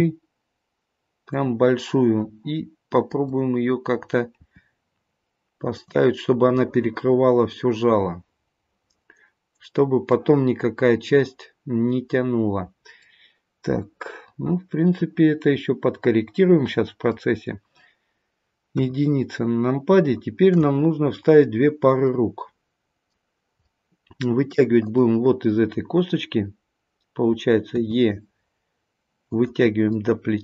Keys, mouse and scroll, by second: 3.2 click, 4.3 g, 6.6 middle click, 13.0 middle click, 18.8 KP_1, 20.0 shift+middle click, 20.7-21.8 scroll up 4, 22.1 middle click, 23.6 middle click, 24.8 click, 27.7 e, 29.9 middle click, 30.1 middle click.